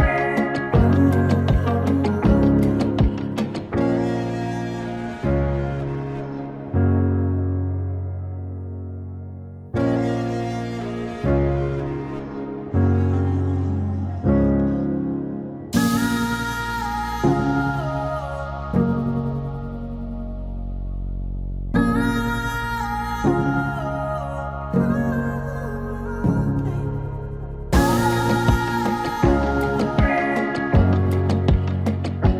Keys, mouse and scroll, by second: 3.1 click, 4.8 click, 5.9 3, 6.3 click, 8.1-12.6 drag, 12.6 click, 13.9 click, 15.6-20.1 drag, 26.2 space, 26.3-29.6 drag, 29.6 n, 30.1-32.3 drag.